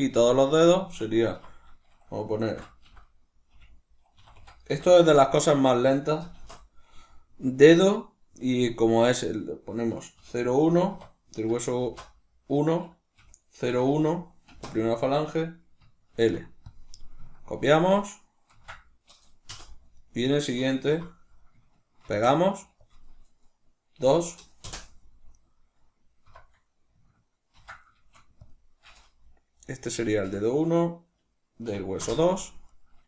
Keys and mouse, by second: 1.2 F2, 19.9 right click, 20.8 F2, 25.2 right click, 26.2 F2, 32.6 right click.